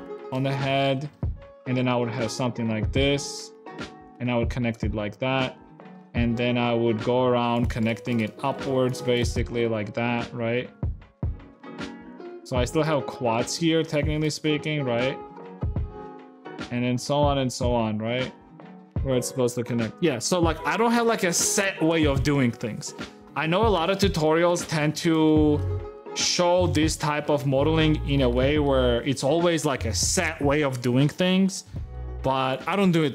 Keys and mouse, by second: 0.5 g, 1.6 e, 4.9 f, 4.9 a, 4.9 g, 6.7 shift+click, 7.4 e, 7.6 click, 7.9 click, 8.7 e, 9.0 click, 10.6 f, 10.6 a, 10.6 g, 11.0 click, 12.1 f, 12.1 a, 13.1 g, 14.4 g, 15.6 click, 16.6 f, 16.6 a, 17.0 f, 17.1 a, 18.5 a, 23.5 Tab, 24.0 middle click, 24.5 shift+middle click, 25.1 shift+click, 27.8 a, 28.3 shift+click, 31.6 shift+middle click.